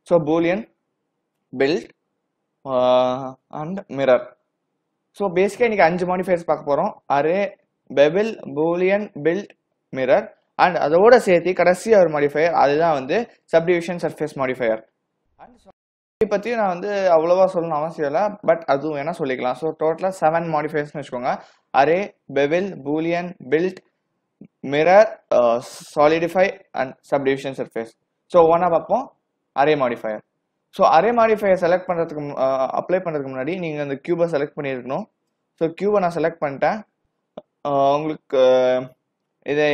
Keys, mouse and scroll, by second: 32.7 click, 36.2-36.7 scroll up 1, 36.7 scroll down 1, 36.7 scroll down 1, 38.5 click.